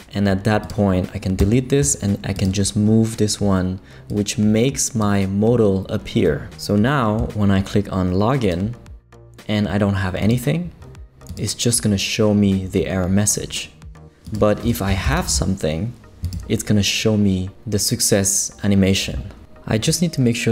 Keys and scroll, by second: 1.4 BackSpace, 14.6-15.8 typing.